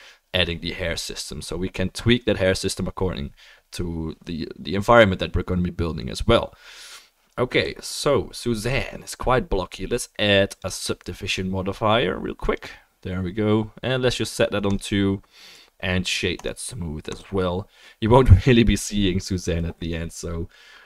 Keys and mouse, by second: 10.6-17.8 drag, 16.4-17.8 right drag.